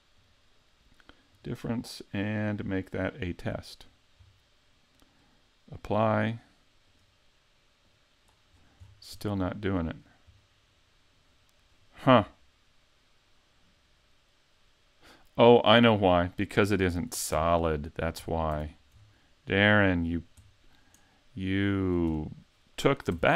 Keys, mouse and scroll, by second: 0.2 click, 2.2 click, 3.8-5.4 scroll down 5, 5.8 click, 6.9 right click, 7.9 click, 8.6 scroll down 4, 8.8-9.2 scroll up 4, 9.2 middle click, 9.9 right click, 10.4 middle click, 11.8 middle click, 17.0 super+z, 17.4 super+z, 18.2 super+z, 18.6 super+z, 19.0-19.8 scroll down 1, 19.8 right click, 19.8-20.5 scroll down 5, 20.5 middle click, 21.6 click, 22.1 scroll down 2, 23.2 x.